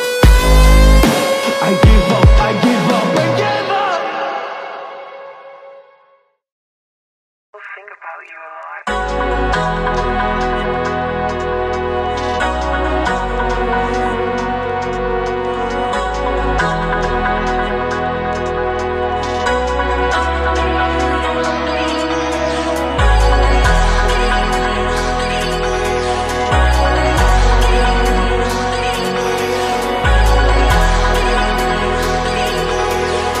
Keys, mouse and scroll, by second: 0.0 click, 0.0 middle click, 0.0-1.0 right drag, 1.0-9.8 middle drag, 7.8-8.8 alt+drag, 7.8-8.8 alt+right drag, 9.2 alt+click, 9.2 alt+right click, 10.7 ctrl+KP_7, 11.2-19.0 alt+drag, 11.4-33.4 alt+middle drag, 12.3 KP_1, 13.6 KP_3, 16.6 shift+d, 19.4 click, 21.3 r, 23.9 g, 26.2 a, 26.7 shift+a, 28.3 g, 30.0 z, 31.0 g, 32.9 z.